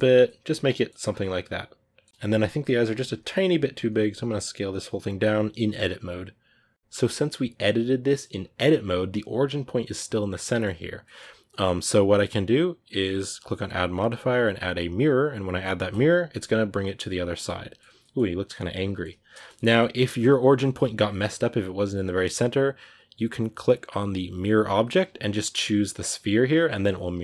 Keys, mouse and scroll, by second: 4.5-5.8 scroll down 1, 5.8-9.8 scroll down 1, 9.8-12.5 scroll down 1, 12.5-15.8 scroll down 1, 15.8-16.4 scroll down 1, 16.4-20.5 scroll down 1, 20.5-21.1 scroll down 1, 21.1-21.8 scroll down 1, 21.8-22.5 scroll down 1, 22.5-23.1 scroll down 1, 23.1-24.5 scroll down 1, 24.5-26.6 scroll down 1, 26.6-27.2 scroll down 1.